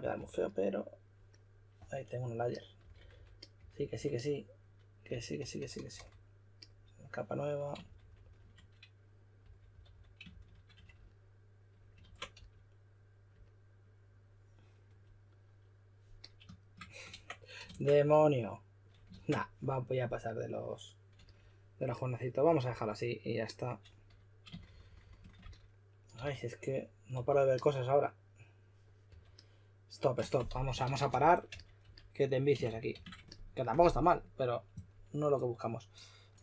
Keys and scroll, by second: 0.0-0.1 typing, 2.8-3.9 typing, 7.8-11.2 typing, 12.0 super+z, 12.3 s, 17.6 super+z, 19.1 super+z, 24.2-27.6 typing, 29.1 typing, 30.2-33.4 typing.